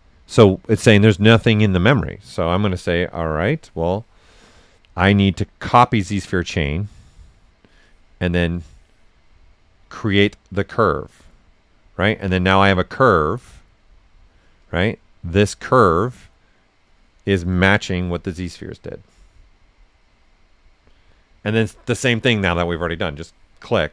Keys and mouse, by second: 3.1 click, 5.7 click, 8.4 click, 10.8 click, 12.2-17.5 right drag, 17.5 click, 17.9 right click, 23.0 click.